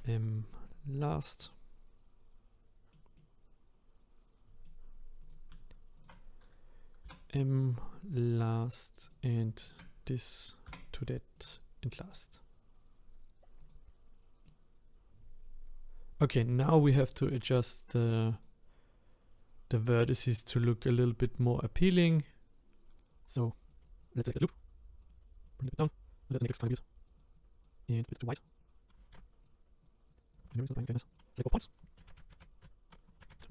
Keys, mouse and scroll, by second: 0.5 m, 1.0-1.4 scroll down 1, 1.4-5.3 middle drag, 5.3 click, 7.7 m, 8.1 middle click, 9.1 click, 11.4 m, 11.9 middle click, 12.4-13.7 scroll down 1, 13.7 click, 14.4-18.4 middle drag, 18.4 click, 19.8 click, 20.6-21.3 scroll up 3, 21.3 click, 22.1 click, 23.2 scroll down 1, 23.5 scroll up 1, 23.7 click, 24.0 alt+click, 25.1 middle click, 25.8 click, 25.9-26.4 scroll up 1, 26.4 click, 26.6 click, 27.2 click, 27.3 click, 28.1 click, 29.4-30.8 drag, 31.6-32.0 scroll up 1, 32.0 ctrl+z, 32.0-33.5 ctrl+z.